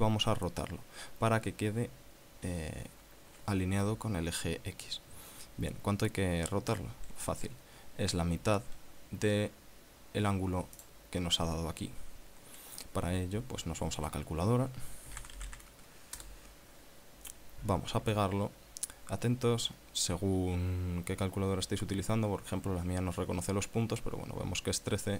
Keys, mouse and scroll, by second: 11.2 click, 18.3 ctrl+v.